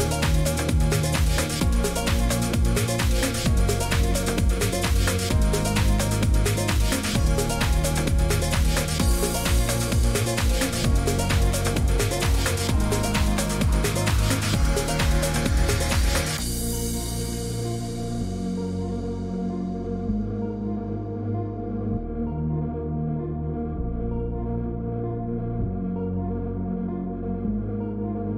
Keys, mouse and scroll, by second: 0.0-28.3 typing, 2.8 click, 4.3 click, 6.5 right click, 7.5 click, 8.5 click, 11.3 click, 16.5 click, 19.8 click, 21.2 click, 21.8 click, 23.9 click, 24.5 click, 25.4 Return, 27.6 click.